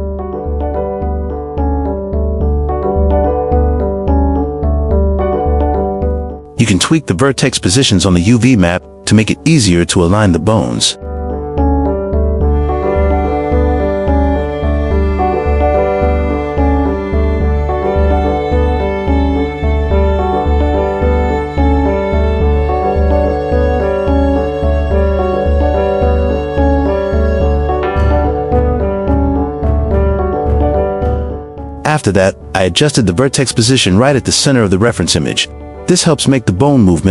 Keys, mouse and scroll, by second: 0.4 click, 0.9-1.2 shift+middle drag, 1.8 shift+middle click, 2.7 g, 3.2 q, 4.8 click, 5.6 click, 6.0 g, 10.7 q, 11.4 shift+middle drag, 12.9 click, 13.7-16.7 drag, 16.0 KP_2, 17.8 click, 18.1-18.5 shift+middle drag, 19.2 q, 20.0 g, 24.0 g, 31.0 q, 31.9 click, 32.4 Tab, 33.2 a, 33.7-35.3 right drag, 36.2 alt+click, 36.6 x.